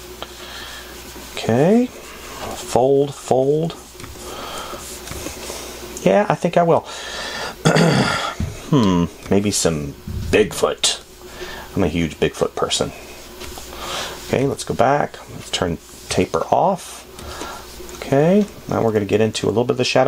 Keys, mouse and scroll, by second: 9.8 space, 14.6 f, 17.6 space.